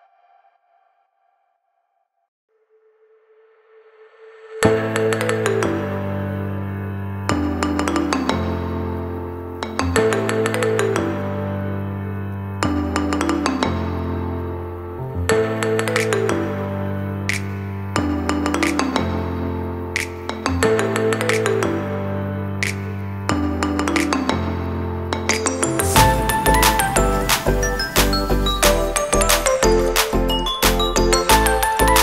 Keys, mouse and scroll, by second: 5.0 alt+a, 8.7 click, 11.9 click, 12.5 g, 14.5 g, 16.0 alt+a, 16.4 click, 16.9 g, 18.6 r, 19.6 g, 21.7 click, 23.1 shift+g, 24.7 r, 26.6 g.